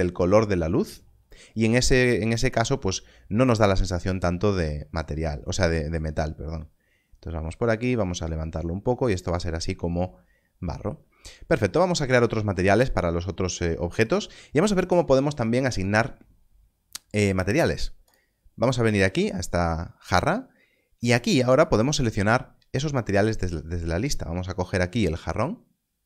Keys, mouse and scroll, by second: 5.4 click, 11.3 scroll down 1, 21.4 click.